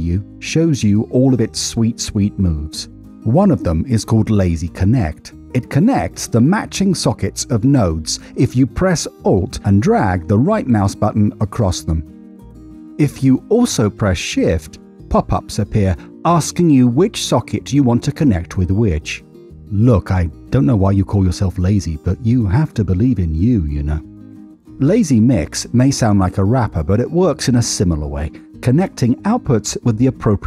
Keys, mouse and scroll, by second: 4.2 middle click, 5.0 middle click, 8.4 alt+right click, 11.7 middle click, 12.4 middle click, 14.8 alt+shift+right click, 23.4 middle click, 24.0 middle click, 27.2 ctrl+shift+right click, 29.6 click.